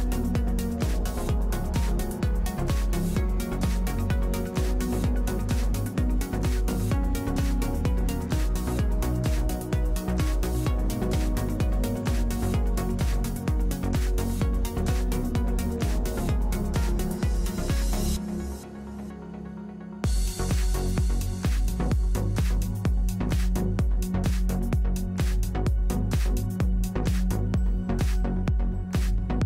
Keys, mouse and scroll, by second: 2.6 ctrl+r, 4.1 ctrl+r, 6.4 a, 7.5 c, 9.9 c, 11.6 click, 11.8 alt+x, 12.6 a, 13.4-15.4 drag, 14.4 shift+d, 15.5 p, 16.0 Tab, 19.8 Tab, 21.1 a, 22.5 BackSpace, 24.0 Tab, 25.9 Tab.